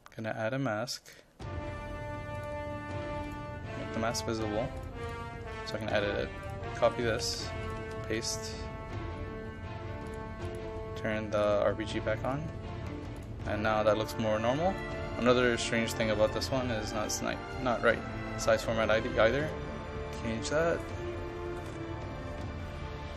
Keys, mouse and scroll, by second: 6.8 ctrl+a, 7.1 ctrl+c, 7.7 click, 8.0 ctrl+v, 10.1-21.5 drag, 21.5 KP_5, 21.7 KP_1, 22.0 KP_2.